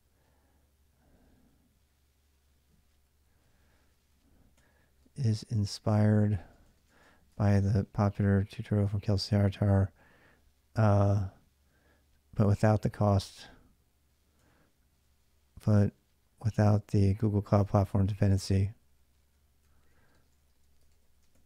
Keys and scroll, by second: 0.5-10.4 typing, 12.3-21.4 typing.